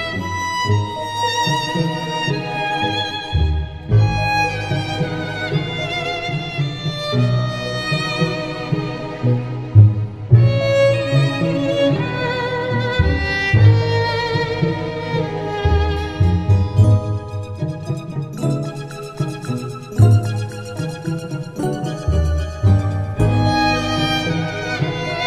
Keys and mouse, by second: 1.0 middle click, 1.9 right click, 2.5 middle click, 3.6 middle click, 4.0 middle click, 10.3 middle click, 11.6 right click.